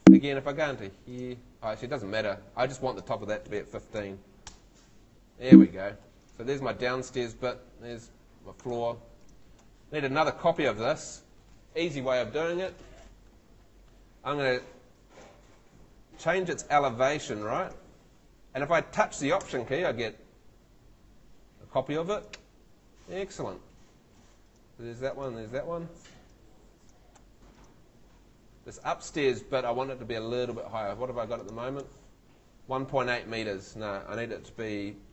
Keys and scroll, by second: 0.0 Escape, 3.6 i, 4.0 5, 4.5 Return, 5.5 Escape, 7.6 Escape, 34.9-35.1 typing.